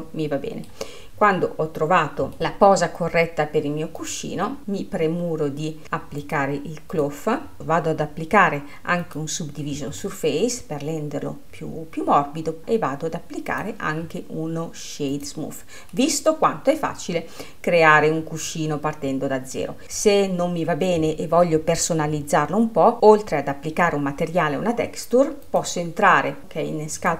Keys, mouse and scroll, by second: 4.0 click, 4.7-6.1 scroll up 1, 6.1 scroll up 1, 6.3-7.6 drag, 10.0-12.6 middle drag, 13.6-16.0 drag, 16.0-24.1 middle drag, 25.5 click.